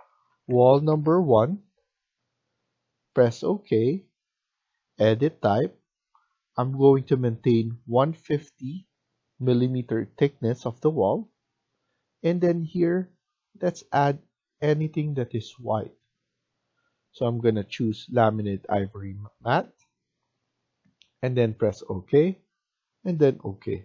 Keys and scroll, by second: 0.0-0.9 typing, 2.8-3.6 typing.